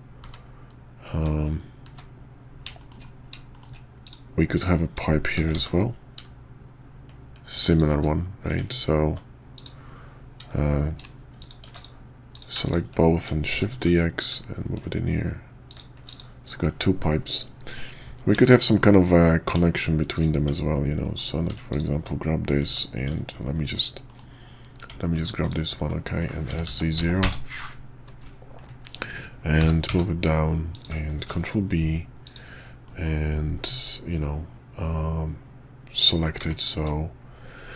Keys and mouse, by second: 0.2 `, 1.1 `, 1.8 `, 2.8 shift+click, 3.5 shift+middle click, 4.0 click, 5.4 shift+d, 9.5 click, 11.4 click, 11.6 x, 12.3 click, 12.6 shift+click, 13.5 shift+d, 16.1 click, 16.5-17.0 middle drag, 17.7 KP_5, 18.4 shift+middle click, 19.1 middle click, 19.6 shift+click, 20.1 click, 20.4 Tab, 21.0 click, 21.7 alt+click, 22.6 Tab, 23.4 click, 24.1 click, 25.4 alt+click, 26.5 s, 29.6 g, 31.2 ctrl+b, 32.8 click, 36.4 q.